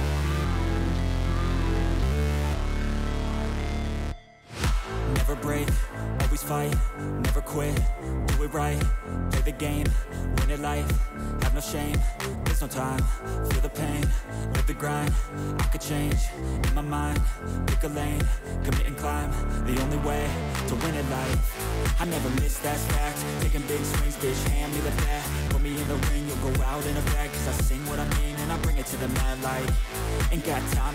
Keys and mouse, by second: 2.0-3.1 drag, 4.2 click, 6.5-8.3 drag, 9.6 click, 10.5 click, 11.6 click, 14.3-15.3 drag, 17.5 click, 20.0-21.7 drag, 23.2 click, 24.7 click, 25.9 shift+click, 26.7 shift+click, 27.7 click, 29.1 click, 29.9 click.